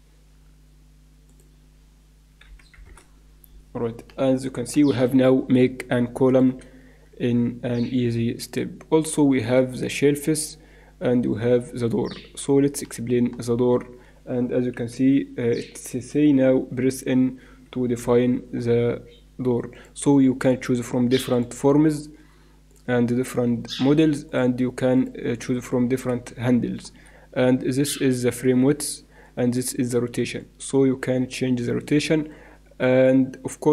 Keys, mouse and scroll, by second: 1.3-3.0 drag, 4.1 middle click, 6.8 shift+a, 12.5-14.7 middle drag, 14.7 t, 16.3 t, 17.2 t, 18.0 n, 19.7-21.2 drag, 21.6-22.9 drag, 23.8 click, 25.4 middle click, 26.5 middle click, 28.3-29.6 middle drag, 30.4-32.2 drag, 32.8 middle click.